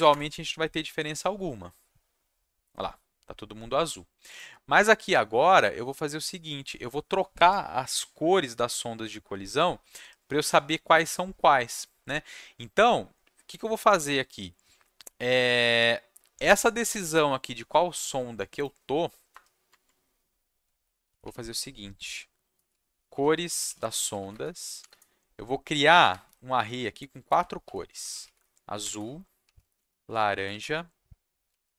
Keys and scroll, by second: 0.1 Return, 19.3 Return, 19.7 Tab, 20.5-24.8 typing, 26.0-31.7 typing, 26.5 Left.